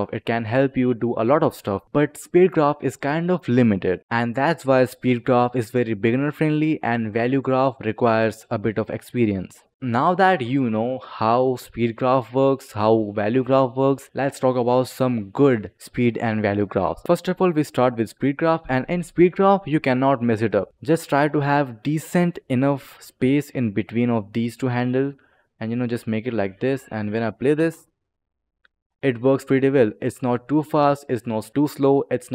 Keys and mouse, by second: 1.6 click, 1.8 click, 4.0 click, 5.4 click, 6.8 click, 16.8 click, 17.0 click, 20.1 click, 21.0 click, 22.0 click, 25.0 click, 25.8 click, 26.6 click, 27.2 click, 27.5 space, 28.9 click.